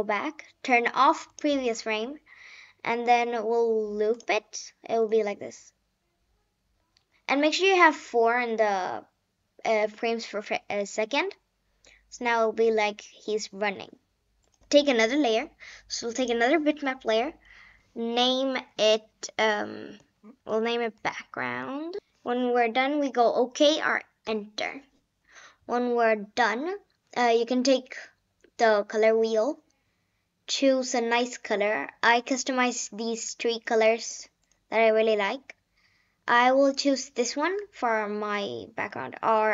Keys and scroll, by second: 17.2 BackSpace, 18.1 Caps_Lock, 19.7 b, 20.4 Caps_Lock, 20.9 a, 21.4 c, 22.0 d, 24.2 Return, 24.7 Return.